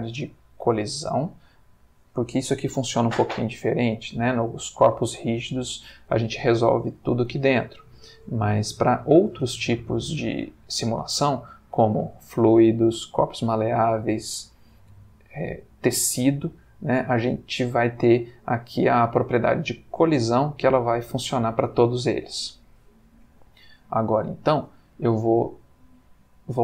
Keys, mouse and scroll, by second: 22.9-24.6 middle drag.